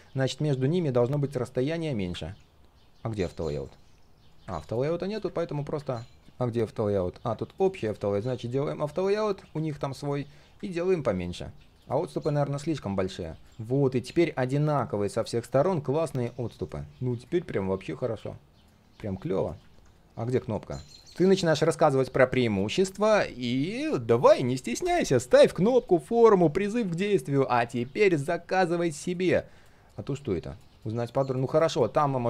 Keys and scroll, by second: 6.2 ctrl+z, 28.8 ctrl+z.